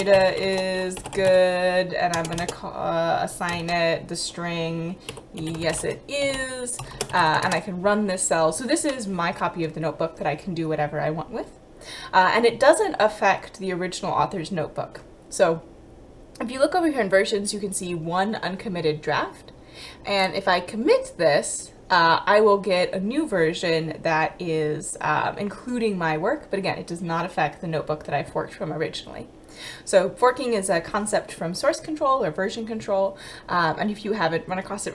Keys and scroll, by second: 0.0-3.6 typing, 4.8-7.7 typing.